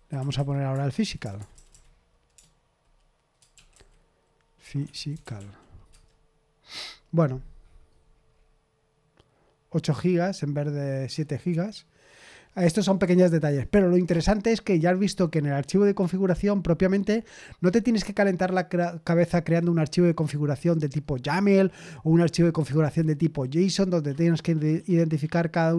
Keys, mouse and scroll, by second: 0.1 Left, 0.3 Left, 0.7-5.8 typing, 5.8 Return.